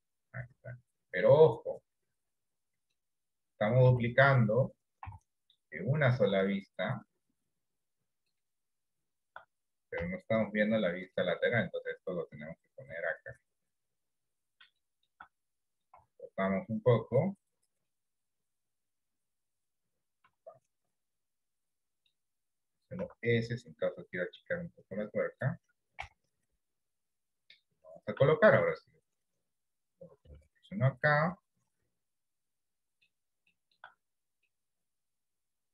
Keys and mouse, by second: 0.1-1.3 middle drag, 3.9 KP_1, 5.1 KP_3, 10.1 KP_1, 11.3 shift+middle click, 12.2-14.1 drag, 15.1 shift+middle click, 16.0 r, 17.9-19.4 drag, 20.3 r, 21.5 middle click, 23.1 s, 26.2 KP_3, 28.4 shift+middle click, 30.2 g, 31.5-33.2 middle drag, 33.6 shift+middle click, 34.6-35.7 middle drag.